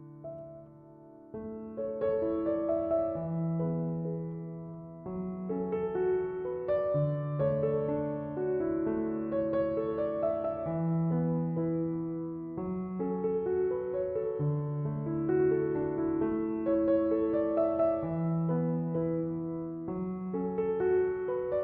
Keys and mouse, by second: 2.7 click, 9.9 click, 11.4 click, 15.5 click, 18.6 click.